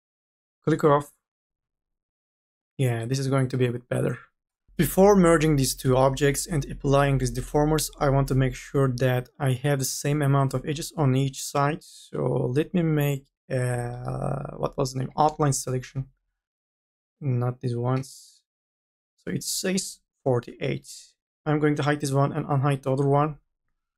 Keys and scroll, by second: 12.7 v, 16.4 e.